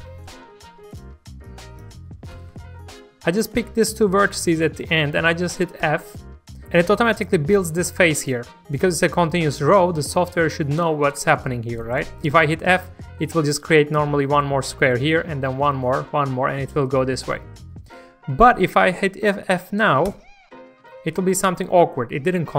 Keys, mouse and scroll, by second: 0.1 y, 0.9-2.7 drag, 2.3 g, 2.6 y, 3.3 shift+click, 4.1 scroll down 1, 4.4 shift+middle click, 5.8 shift+f, 10.2 shift+middle click, 18.3-20.0 scroll up 1, 20.0 f.